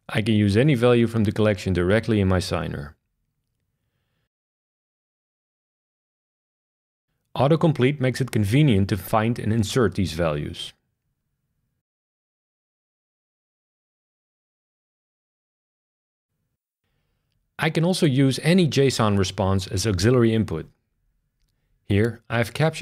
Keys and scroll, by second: 3.2 shift+[, 3.4 shift+[, 4.2 Down, 4.7 Up, 5.6 Down, 5.7 Return, 6.6 Tab, 7.3 Tab, 8.0-9.3 typing, 9.7 Return, 10.2 Tab, 10.6 Tab, 11.4 Tab, 11.6 Tab, 12.3 shift+Tab, 12.9-14.3 typing, 14.4 Return.